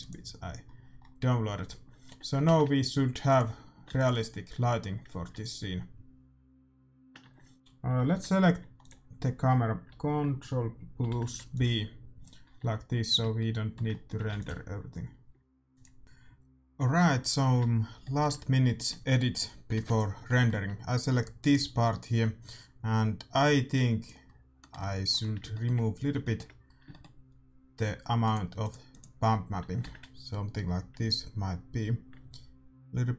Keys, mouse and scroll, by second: 0.0-1.8 drag, 0.6-4.0 middle drag, 2.1 a, 4.0 shift+z, 4.1 ctrl+s, 4.1-5.8 drag, 9.0-10.7 super+drag, 11.0 ctrl+b, 13.4 middle click, 14.4 ctrl+s, 15.8 middle click, 16.0 click, 17.0-19.7 middle drag, 19.7 KP_0, 19.9-21.9 middle drag, 21.9-23.2 right drag, 23.7 click, 29.1-31.1 drag, 31.1 shift+z.